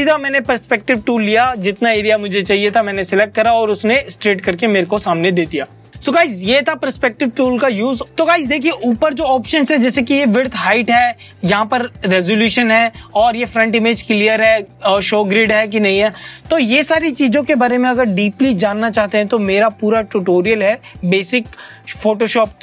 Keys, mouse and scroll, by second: 6.1 click.